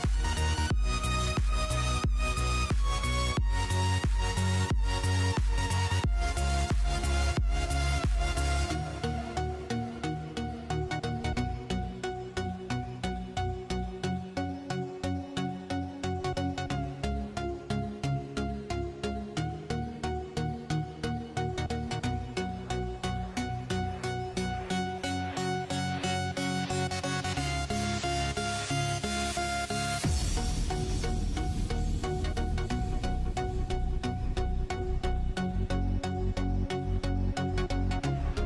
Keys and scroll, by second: 2.1-5.3 typing, 30.8-33.4 typing, 35.1-36.1 typing, 37.7-38.4 typing.